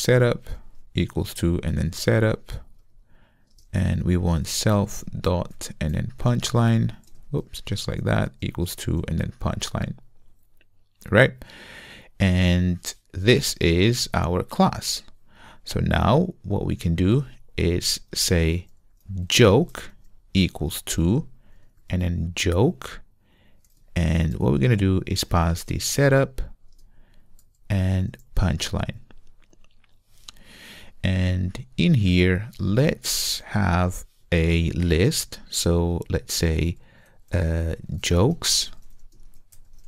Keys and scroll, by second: 2.9 Return, 4.9 Return, 6.1 Return, 7.2 Return, 12.3 super+v, 22.6 Return, 25.7 Return.